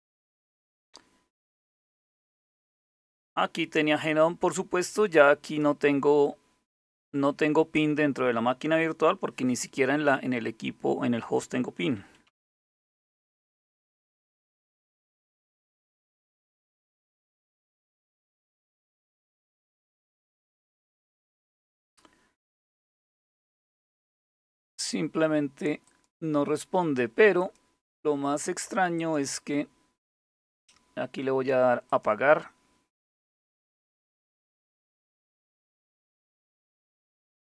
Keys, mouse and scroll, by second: 5.0 click, 11.4-15.7 typing, 22.8 ctrl+c, 25.5 click, 27.0 click, 28.6 click, 31.5 click, 33.0-37.5 drag.